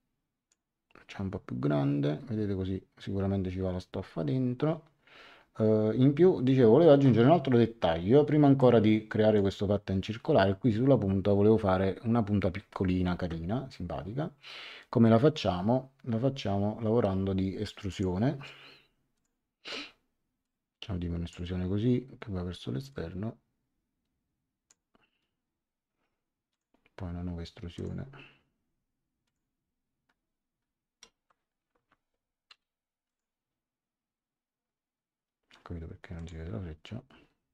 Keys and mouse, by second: 8.5 click, 17.9 click, 19.1 click, 20.4 click, 22.9 click, 26.5 click, 27.7 click, 29.2 click, 31.7 Escape, 32.5 e, 33.0 click, 36.1 click.